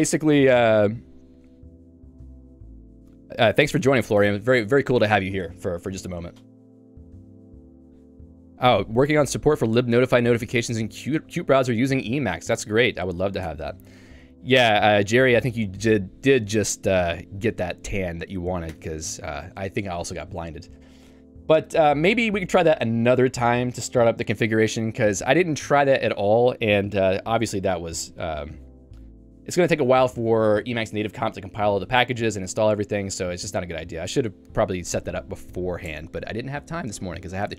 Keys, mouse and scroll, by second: 13.3 click, 13.5 Escape, 18.7 Escape, 29.9 click, 30.1 click.